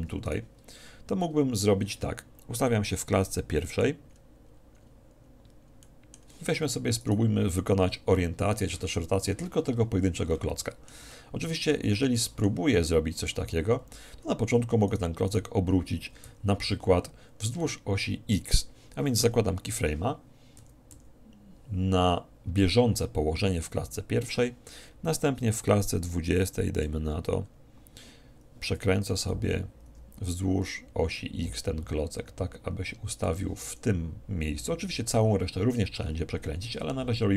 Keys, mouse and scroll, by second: 0.2-2.6 right drag, 2.6-6.4 drag, 6.4-7.8 middle drag, 7.0-9.0 right drag, 10.6-15.0 middle drag, 15.0-17.2 right drag, 16.3 z, 16.8 z, 17.8-19.4 middle drag, 21.0 i, 26.5-28.2 drag, 28.2-29.4 middle drag, 29.0 r, 33.3-35.0 drag.